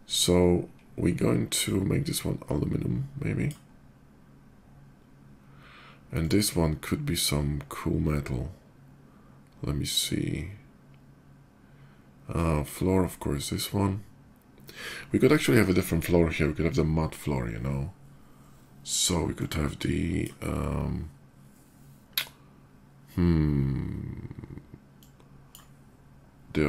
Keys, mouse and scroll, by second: 1.4-3.3 drag, 5.9 click, 11.9 click, 19.1-20.0 drag, 24.7 click.